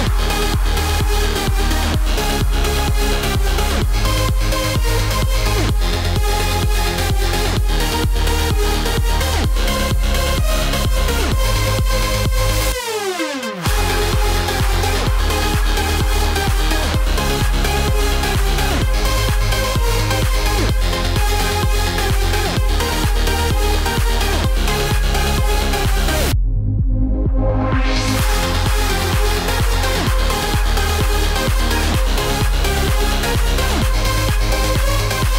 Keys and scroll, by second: 32.3 F9.